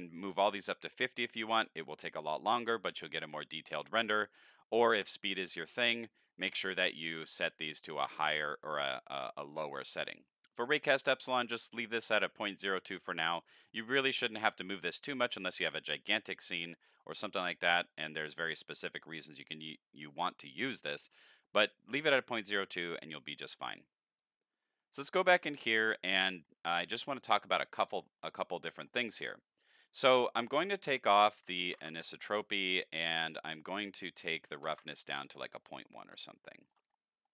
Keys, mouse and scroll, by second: 10.3 click, 24.1 click, 26.1 middle click, 28.0 middle click, 28.4 middle click, 28.7 middle click, 30.3 click, 33.7 click, 35.7 middle click, 36.0 shift+middle click, 36.7 shift+middle click, 36.9 scroll down 3.